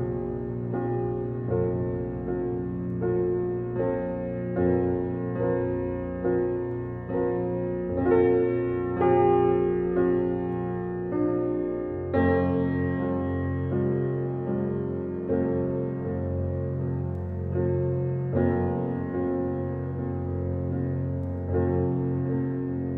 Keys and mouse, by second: 0.2-1.0 drag, 1.4-2.4 drag, 3.4-4.4 drag, 4.8-6.5 drag, 7.2 click, 8.1 ctrl+z, 8.4 click, 9.3 click, 10.0 click, 10.9 click, 11.8 Delete, 12.5 click, 13.0 click, 13.4 click, 14.7-17.2 drag, 17.8 click, 19.0 click, 20.4 click.